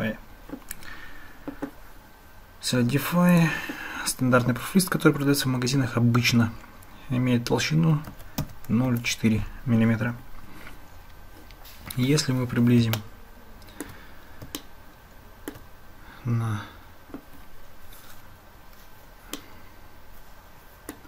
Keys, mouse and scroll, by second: 3.4-9.9 drag, 13.0-13.9 shift+middle drag, 14.6-15.6 shift+middle drag, 19.4-21.0 middle drag.